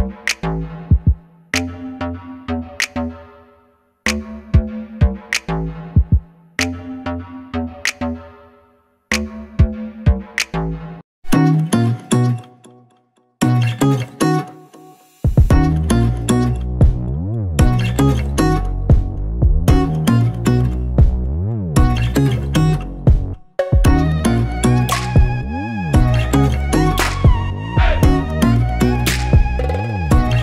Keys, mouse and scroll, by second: 3.2 KP_1, 3.9 g, 6.0 click, 6.3 middle click, 7.8 s, 8.6 click, 8.8-10.0 middle drag, 10.5 g, 11.4 click, 11.5-12.7 middle drag, 12.2 scroll up 1, 13.2 Tab, 15.4 i, 16.3 Escape, 16.5 Tab, 16.8 Delete, 17.1 scroll down 1, 17.3 middle click, 18.2 KP_7, 19.2 shift+a, 19.7 g, 20.6 click, 20.8 r, 21.4 KP_Enter, 22.2 r, 23.2 KP_Enter, 23.6-27.1 middle drag, 24.7 r, 25.6 KP_Enter, 26.3 g, 27.1 click, 27.3 KP_1, 27.9 g, 29.1 click, 29.2-30.4 middle drag, 29.8 scroll up 1.